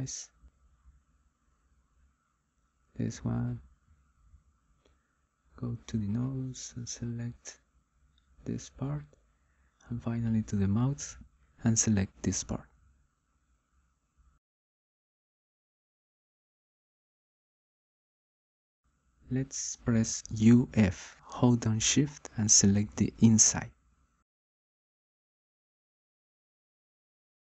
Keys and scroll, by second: 19.9 u, 20.7 f.